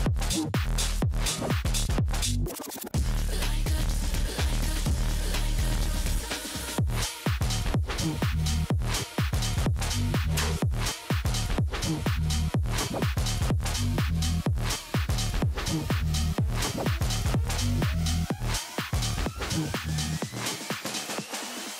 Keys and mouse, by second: 4.7 click, 6.0 click, 7.3 click, 8.3 click, 9.5 click, 10.4 click, 12.2 x, 12.3 click, 13.1 x, 13.2 click, 13.6 click, 13.9 click, 14.6 click, 15.1 click, 16.5 click, 19.8 click, 20.0 click, 20.3 x, 20.4 click, 21.1 click.